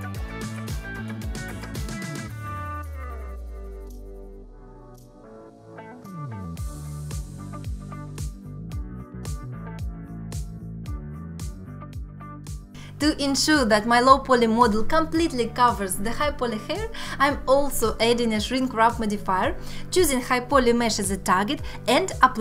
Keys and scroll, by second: 0.2 g, 1.4 g, 5.2 g, 9.0 g, 10.3 ctrl+z, 10.7 g, 11.7 alt+q, 12.0 alt+q, 13.8 Tab.